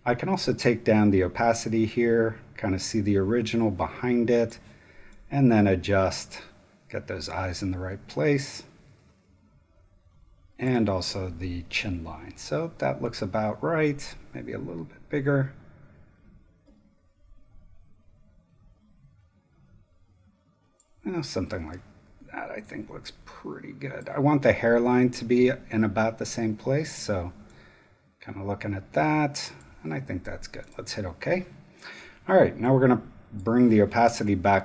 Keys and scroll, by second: 34.0 space.